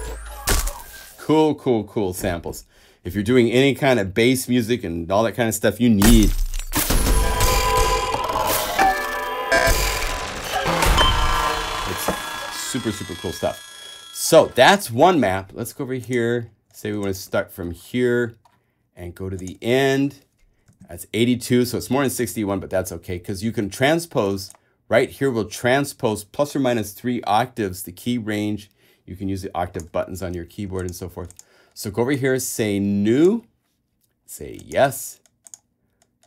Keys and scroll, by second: 21.0 shift+super+Tab.